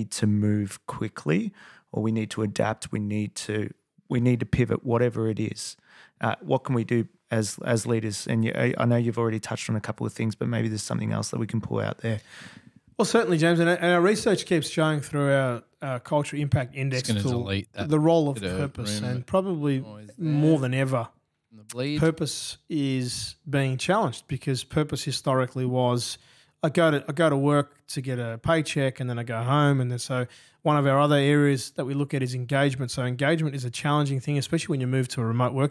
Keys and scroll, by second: 2.5 super+Tab, 24.0 F8, 28.8 super+Tab, 29.8 super+Tab, 30.0 super+Tab, 30.7 super+Tab, 35.3 super+[.